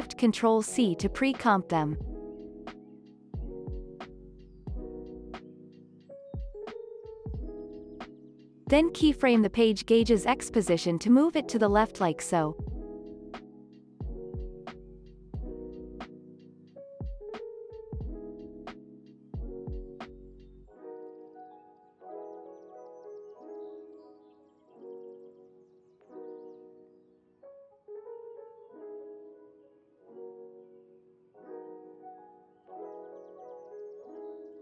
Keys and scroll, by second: 1.1-4.4 typing, 5.2 ctrl+s, 25.9 ctrl+s.